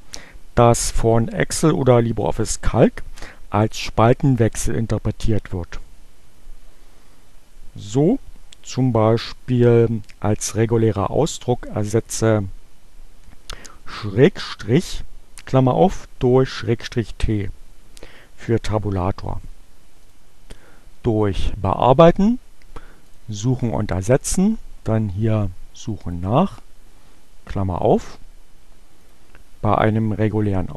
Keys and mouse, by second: 20.1 click, 22.3-23.4 drag, 25.4 click, 28.9 click.